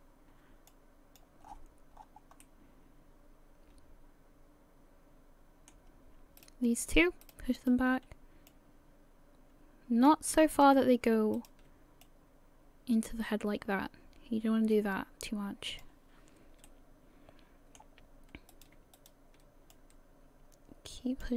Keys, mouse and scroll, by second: 0.7 click, 1.5-2.4 scroll down 11, 2.5 middle click, 6.4 right click, 6.8 shift+right click, 7.2 shift+right click, 7.6 shift+right click, 8.5 click, 10.5 right click, 11.4 shift+right click, 12.0 click, 16.7 middle click, 18.5 right click, 19.0 shift+right click, 19.8 click.